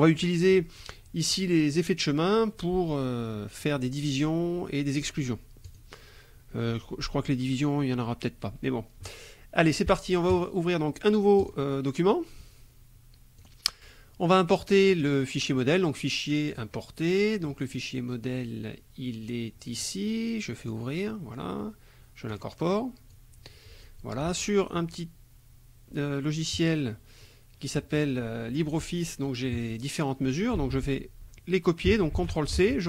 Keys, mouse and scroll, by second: 1.4 click, 5.7 click, 10.3 click, 11.4 click, 13.4 click, 14.9 click, 16.5 click, 19.8 click, 20.6 click, 22.3 click, 23.1 click, 26.5 click, 30.3 ctrl+click, 30.6 ctrl+a, 32.2 ctrl+c, 32.7 ctrl+alt+Tab.